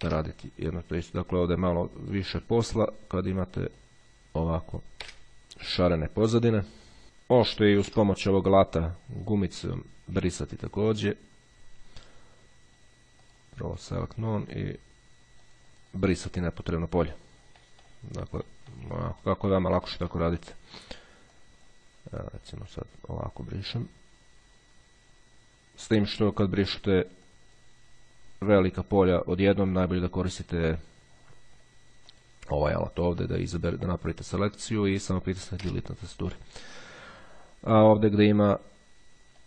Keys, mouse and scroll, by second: 0.1 Delete, 1.6 click, 3.4-5.1 drag, 5.1 Delete, 6.1-6.6 ctrl+scroll down 2, 6.6-7.1 ctrl+scroll down 1, 7.1 click, 8.0 Delete, 9.4 click, 11.0 click, 13.5 click, 15.7-17.2 drag, 17.8 click, 18.7 click, 20.3 click, 21.5-26.9 drag, 27.5 click, 28.4-28.9 scroll down 2, 28.9-29.5 scroll up 2, 29.5 scroll down 2, 31.5 click, 33.1-35.5 drag, 35.7 Delete.